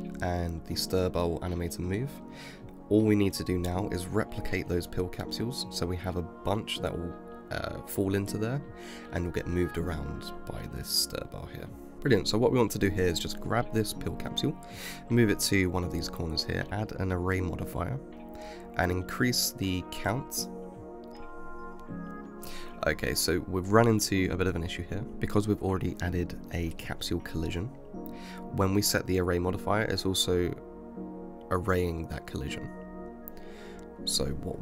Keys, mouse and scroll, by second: 7.7 space, 9.7 shift+Left, 10.9-12.4 middle drag, 12.4 g, 15.1-18.1 shift+middle drag, 18.1 click, 21.0 click, 21.2-23.4 middle drag, 23.4 space, 24.0 space, 24.4-25.2 scroll down 13, 25.2-27.5 middle drag, 27.5 shift+Left, 27.9 space, 29.1 space, 29.6 shift+Left, 30.1 space, 31.3 space, 31.8 shift+Left, 32.8-33.7 scroll up 12, 33.7 middle click, 34.1 right click.